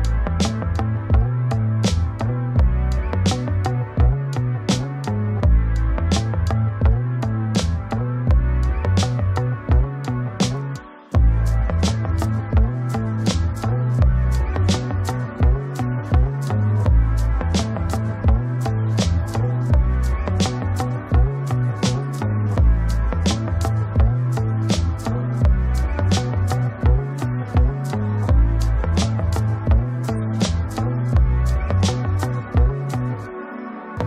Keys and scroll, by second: 6.2 ctrl+space, 17.1 ctrl+space, 20.4 ctrl+z, 22.1 ctrl+space, 26.6 ctrl+e, 32.7 ctrl+space.